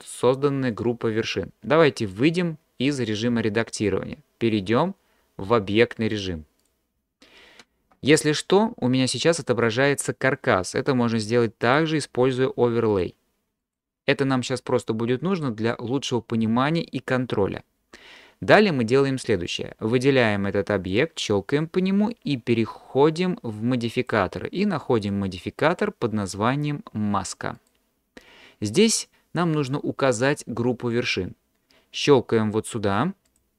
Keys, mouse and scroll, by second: 6.1-6.7 drag, 11.8-14.1 drag, 24.0 click, 25.0-27.8 drag, 33.4-33.5 drag.